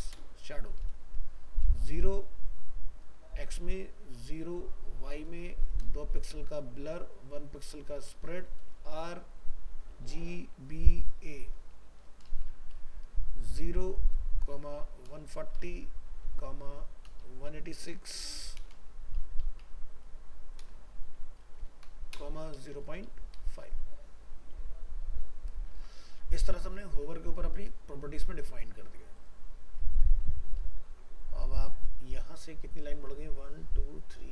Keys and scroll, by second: 25.7 ctrl+s, 30.7 ctrl+s.